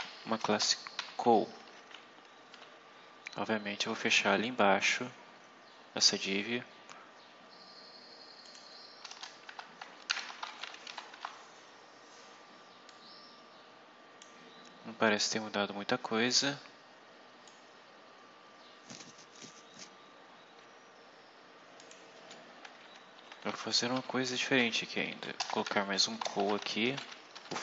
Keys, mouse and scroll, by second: 0.0-0.3 typing, 2.4 Home, 4.3-5.0 scroll down 4, 6.6 scroll up 2, 8.4 click, 9.0 Return, 9.4-11.5 typing, 12.8-14.3 drag, 14.4-15.6 scroll down 6, 15.6-16.6 scroll up 6, 17.4-19.5 drag, 19.8 scroll up 2, 21.7 click, 23.1 shift+Home, 23.9 ctrl+c, 24.2 ctrl+Up, 24.5 ctrl+End, 25.0 ctrl+Up, 25.4 Return, 25.6 ctrl+v, 26.1-27.6 typing.